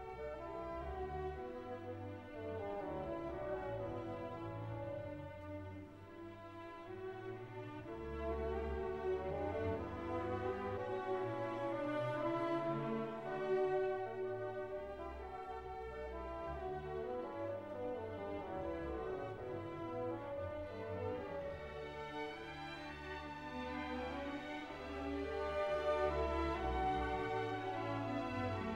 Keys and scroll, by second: 26.0 ctrl+d.